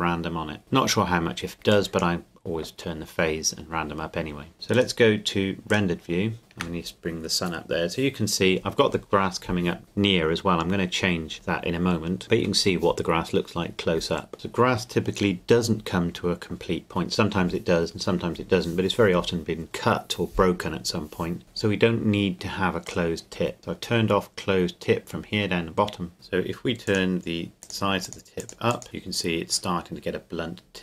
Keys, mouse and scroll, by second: 4.7 click, 6.4 shift+click, 14.3 click, 22.9 click, 29.4 click.